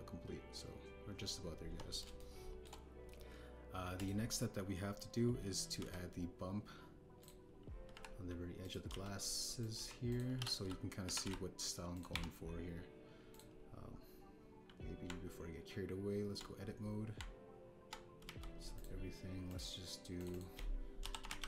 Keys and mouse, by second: 2.6 KP_1, 3.1-3.6 shift+middle drag, 4.9 click, 6.7 shift+a, 8.9-13.0 typing, 9.6 click, 10.5 click, 11.1 drag, 12.9 click, 16.0 Tab, 18.1 Tab, 19.2 a, 19.7 click, 20.4 click, 21.1-21.4 drag.